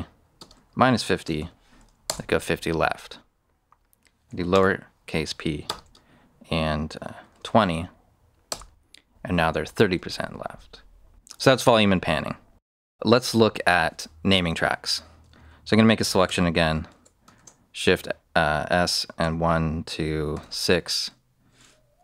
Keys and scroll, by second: 0.0-1.8 typing, 2.0 Return, 4.5 p, 5.6 space, 6.9-7.7 typing, 8.4 Return, 16.2 s, 16.8 BackSpace, 17.3 shift+s, 19.2-20.8 typing.